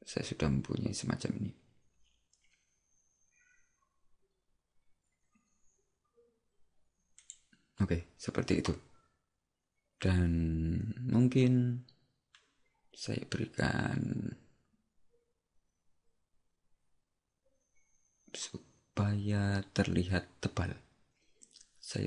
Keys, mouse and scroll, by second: 7.3 click.